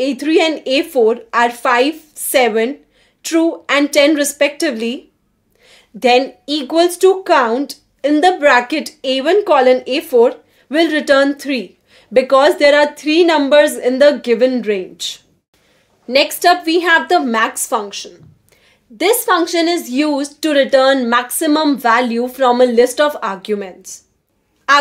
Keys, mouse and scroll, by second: 0.0-0.8 typing, 3.0 shift+a, 3.9 1, 5.2-7.2 typing, 15.3 click, 16.7 2, 18.3 click.